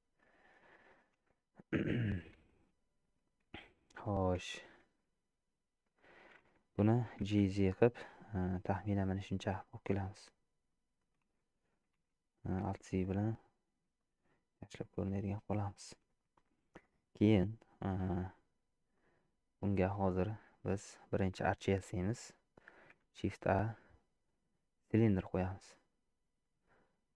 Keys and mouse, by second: 0.3 click, 1.2 shift+z, 2.3 alt+z, 2.7 middle click, 4.4 alt+z, 4.7 middle click, 6.0 shift+middle click, 7.1 g, 10.0 Tab, 10.7 middle click, 11.2 shift+z, 12.0 shift+z, 12.6 alt+z, 13.1 click, 14.0 shift+click, 14.8 shift+click, 16.3 shift+click, 18.9-20.4 middle drag, 23.0 shift+a.